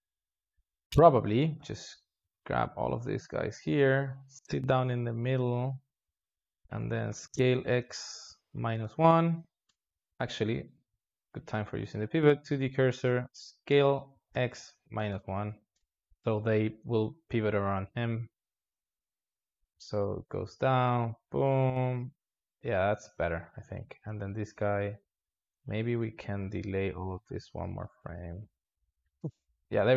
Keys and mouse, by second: 2.1 a, 4.1-7.0 drag, 7.0 s, 10.5 ctrl+z, 13.6 s, 18.7-20.7 drag, 24.0 click, 28.2-29.5 drag, 29.5 alt+shift+z, 29.8 space.